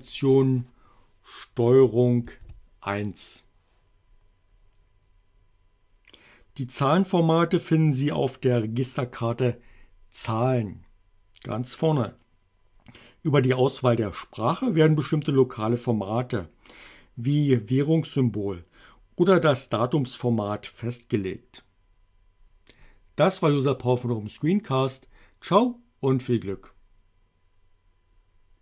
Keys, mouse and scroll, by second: 0.4 click, 2.2 ctrl+1, 10.4 click.